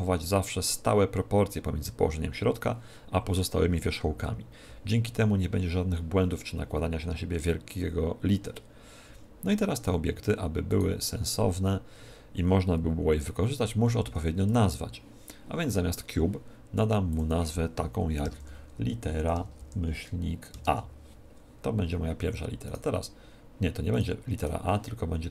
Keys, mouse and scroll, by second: 10.6 right click, 13.7 n, 17.0-19.0 drag, 22.6-25.3 right drag.